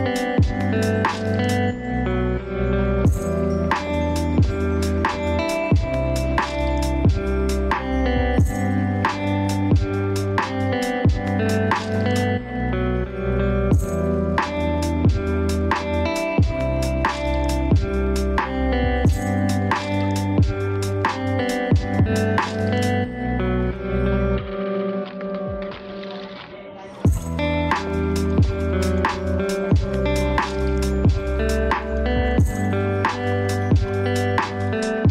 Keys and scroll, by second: 12.1 ctrl+space, 15.4 ctrl+2, 15.8 ctrl+space, 30.1 ctrl+z, 30.5 ctrl+space.